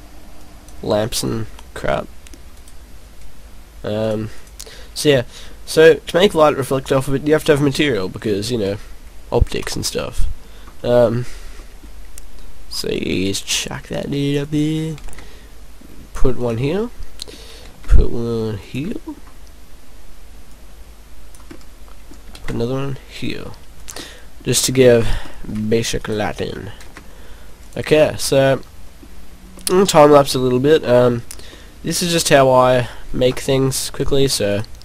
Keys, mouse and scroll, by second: 0.4 click, 1.3 click, 1.8 middle click, 2.5 right click, 4.1 click, 4.4 click, 9.9 click, 10.5-11.0 scroll down 3, 11.6 middle click, 12.9 right click, 15.3 shift+d, 16.5 click, 16.7 middle click, 18.0 shift+d, 18.7 click, 18.9 middle click, 20.5 click, 21.5 click, 21.6 middle click, 22.7 shift+d, 23.9 click, 24.0 middle click, 24.6-25.2 scroll up 6, 25.4 middle click, 26.0 right click, 26.8 shift+s, 27.9 middle click, 28.8 middle click, 29.0-29.3 scroll up 5, 29.4-29.7 scroll down 3, 31.3 scroll up 1, 32.1 middle click, 32.8 scroll down 4, 34.5 e.